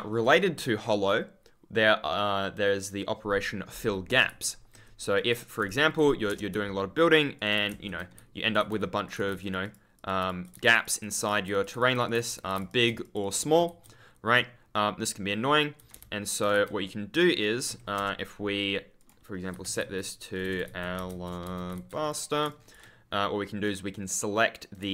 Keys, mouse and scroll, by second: 0.1 click, 4.2 w, 4.6 Escape, 5.1 click, 5.7-6.0 scroll up 1, 7.2-11.5 typing, 7.3 super+click, 9.0 click, 9.4 click, 10.2 click, 10.6 click, 11.7 click, 13.4 ctrl+d, 13.6 ctrl+s, 14.6 scroll down 1, 15.1 scroll up 1, 15.7 s, 15.9 ctrl+space, 16.5 e, 17.6 Escape, 18.9 click, 19.2-22.2 typing, 22.0 click, 22.4 ctrl+click, 22.5-22.9 ctrl+scroll down 1, 23.6 right click.